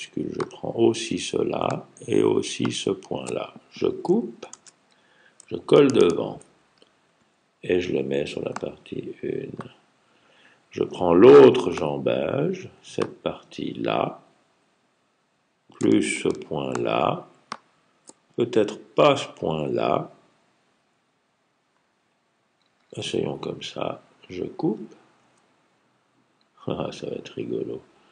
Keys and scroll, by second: 4.4 super+x, 6.1 super+f, 25.0 super+x.